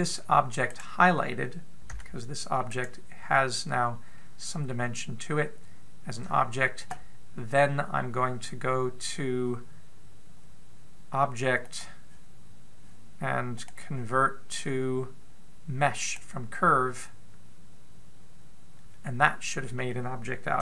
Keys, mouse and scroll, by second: 1.5 right click, 2.8 g, 12.4 click, 14.3 click.